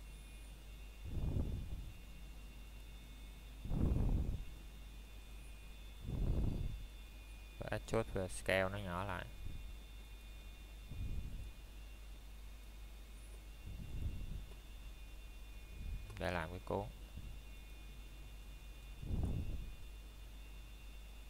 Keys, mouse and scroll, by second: 0.9 click, 8.0 middle click, 11.8 e, 14.3 click, 14.7 scroll down 1, 15.1 middle click, 16.5-17.1 scroll down 1, 17.1 middle click, 17.4 scroll up 1, 18.4 middle click, 18.5 scroll up 1, 20.7 s.